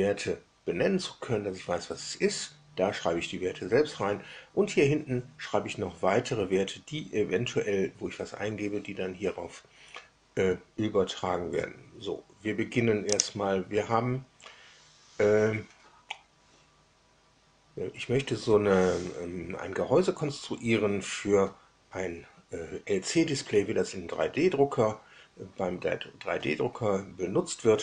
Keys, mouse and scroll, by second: 13.0 click.